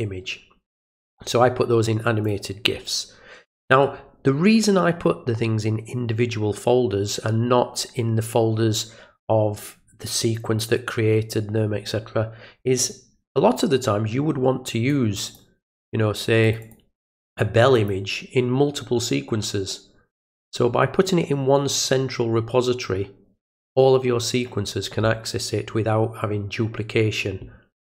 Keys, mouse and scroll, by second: 2.2 click, 14.9 click, 15.3 click, 16.4 click, 16.6 click, 17.8 click.